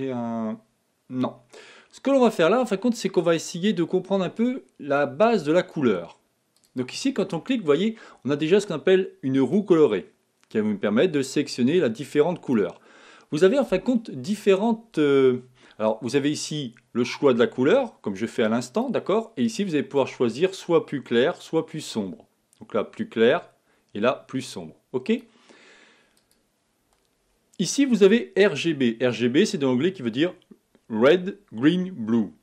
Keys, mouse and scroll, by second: 2.4 click.